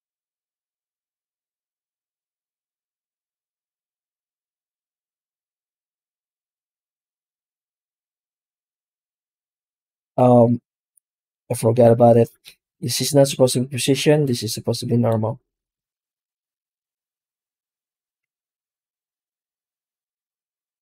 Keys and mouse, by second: 6.8 middle click, 8.4 z, 14.1-15.0 drag, 19.0 z.